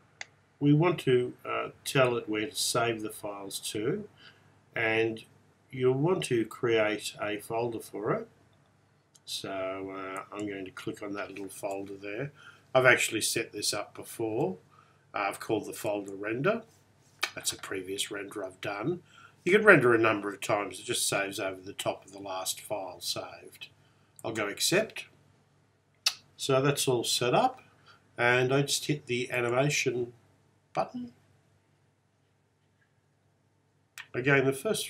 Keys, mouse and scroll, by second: 10.3 click, 24.5 click, 29.4-34.8 drag.